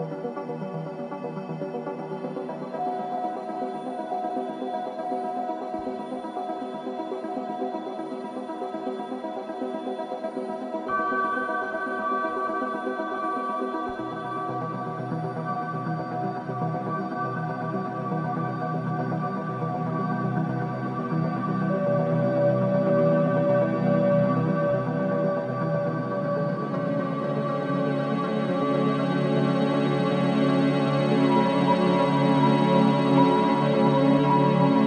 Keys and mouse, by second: 0.0-3.0 ctrl+alt+drag, 4.6 click, 5.4 0, 6.1-7.3 ctrl+alt+drag, 8.7-10.1 drag, 12.1-20.2 alt+drag, 20.4 Tab, 20.8-22.0 drag, 22.0-22.9 typing, 22.9-24.0 drag, 24.0 Tab, 24.8-26.2 drag, 25.2 typing, 26.4-27.7 drag, 27.0-29.0 typing, 29.4-30.8 ctrl+alt+drag, 31.6 click, 32.5 click, 34.3 click.